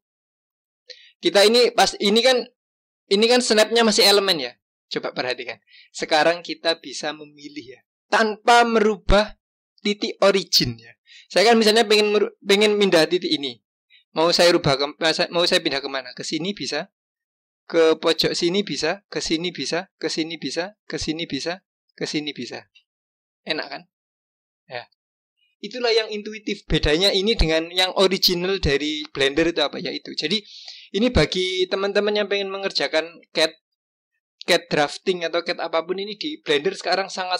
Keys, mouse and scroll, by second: 0.5 g, 25.1 click, 26.6 click.